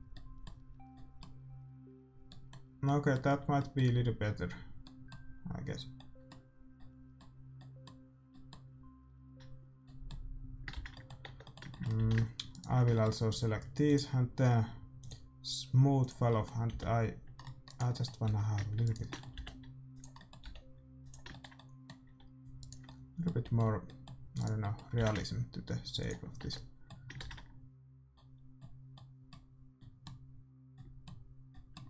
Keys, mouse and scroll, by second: 1.0-8.4 middle drag, 10.7 shift+z, 11.2 Tab, 11.9 a, 12.4-14.3 right drag, 13.8-17.0 drag, 14.6 middle click, 16.2-17.6 middle drag, 16.7 g, 18.2 r, 19.3 g, 20.4 r, 22.0 a, 22.7-25.0 right drag, 24.9 g, 26.4 Tab, 27.2 shift+z.